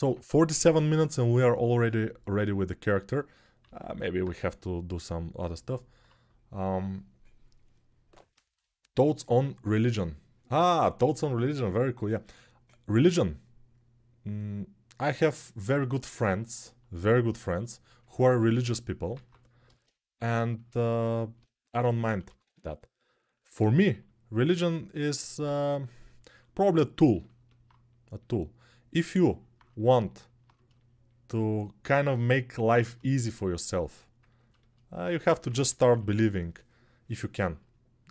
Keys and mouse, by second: 3.4 alt+q, 4.2 g, 19.0 click, 19.9-38.1 alt+shift+drag, 21.5 g, 22.0 ], 22.2 ], 23.3 alt+q, 35.2 p, 35.4 [, 35.6 [.